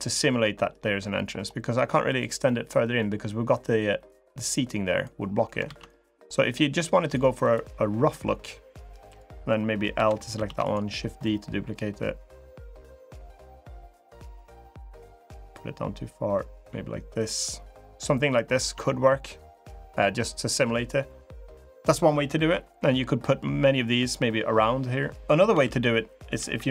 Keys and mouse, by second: 1.8 click, 2.6 middle click, 3.6-4.8 drag, 5.4 ctrl+z, 8.8 click, 9.7 l, 10.2 shift+d, 11.0-12.2 drag, 12.8-15.3 drag, 15.9-17.0 drag, 18.5 Tab, 22.5 middle click, 25.2 Tab, 25.3 l, 26.1 l.